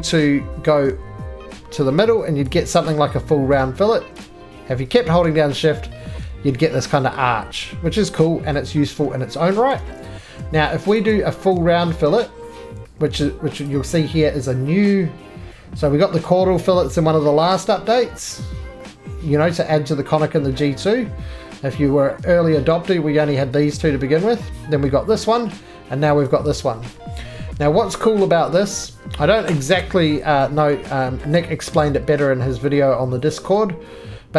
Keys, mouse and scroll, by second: 2.4 shift+click, 3.5 middle click, 6.9 shift+click, 8.5 middle click, 9.6 ctrl+z, 13.7 click, 26.3 click, 27.5 middle click, 27.6-28.6 scroll down 3, 28.6 middle click, 28.7-29.6 scroll down 1, 29.6 right click, 30.5 middle click, 30.5-32.8 scroll, 31.2 middle click, 32.8 scroll down 5, 33.5 middle click, 34.1-34.3 scroll down 2.